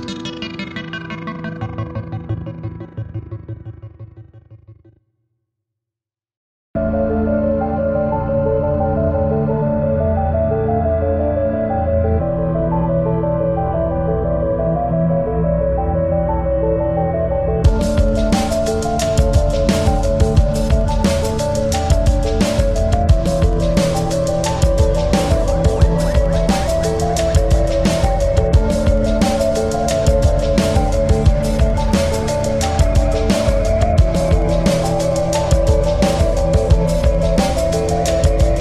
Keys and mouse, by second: 0.5 ctrl+=, 1.1 space, 2.4 click, 2.4 space, 4.9 right click, 5.0 right click, 5.7 click, 6.2-9.4 drag, 10.2 click, 11.8 click, 14.3 click, 16.2 click, 16.3 click, 17.5-19.3 drag, 19.4 click, 21.2 click, 22.6 click, 27.0 click, 27.2 ctrl+=, 29.3-32.0 drag, 34.2 click, 37.0 click, 37.0 typing.